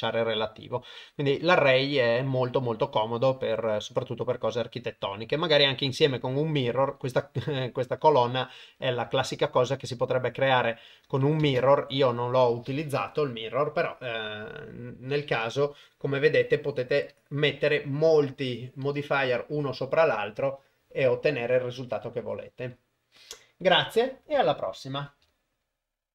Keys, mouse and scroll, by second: 11.4 shift+space.